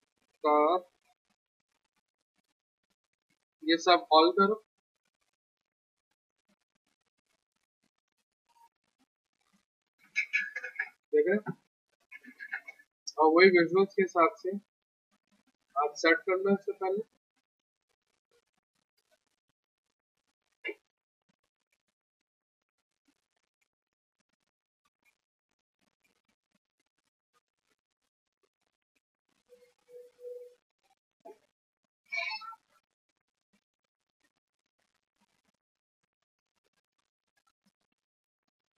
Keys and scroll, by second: 12.2 r, 22.6 e, 23.0 a, 25.8 w, 28.9 p, 29.5 z, 30.8-31.8 typing.